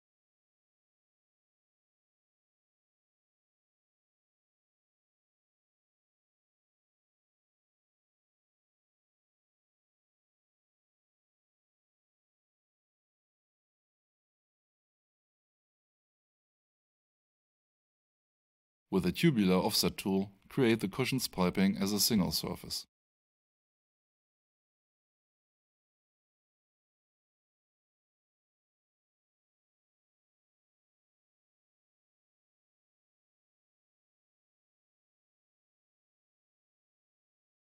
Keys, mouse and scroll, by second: 8.7 F5, 9.7 alt+shift+right click, 10.5 alt+shift+middle click, 14.1 F8, 15.6 click, 17.4 right click, 26.6 click, 27.9-28.8 typing, 30.9 click, 34.6 click, 35.8 3, 36.1 Return.